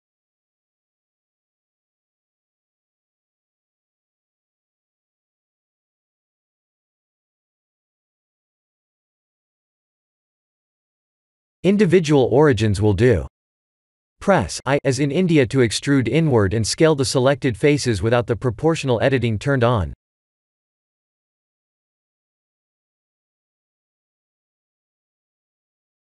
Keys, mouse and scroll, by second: 0.5 click, 2.8-3.2 scroll up 2, 3.0 Tab, 3.5 shift+middle click, 4.1 Tab, 4.2 middle click, 4.7 3, 5.8 alt+click, 7.7 alt+click, 9.8 alt+shift+click, 9.9 alt+shift+click, 11.7 click, 14.6 i, 19.7 s, 21.1 ctrl+z, 21.8 o, 22.3 s, 25.6 Tab.